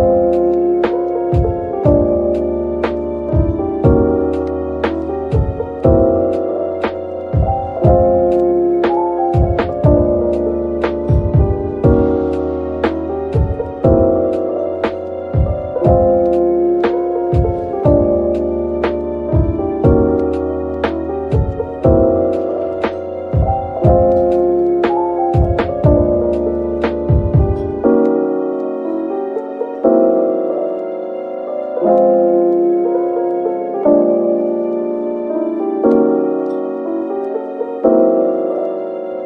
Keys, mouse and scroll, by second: 3.7 scroll, 3.9 scroll down 1, 4.6 scroll up 1, 5.8 scroll down 1, 9.3-10.1 typing, 13.4 shift+click, 16.7-17.0 scroll up 2, 19.2 shift+click, 20.5 shift+click, 21.4 /, 21.9 scroll up 1, 25.5 scroll up 1, 27.8 scroll up 1, 28.3 double click, 37.3-37.8 scroll down 1.